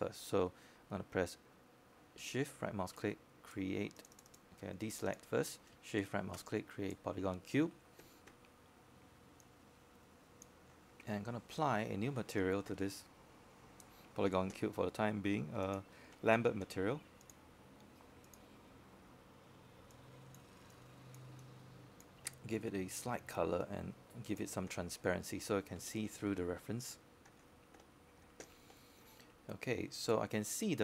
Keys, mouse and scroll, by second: 0.7-1.4 scroll down 1, 1.8-5.2 scroll up 1, 5.5 shift+right click, 7.1 click, 9.1 shift+right click, 12.6 click, 14.3-14.8 scroll up 1, 14.8-17.5 right drag, 18.9-30.5 drag.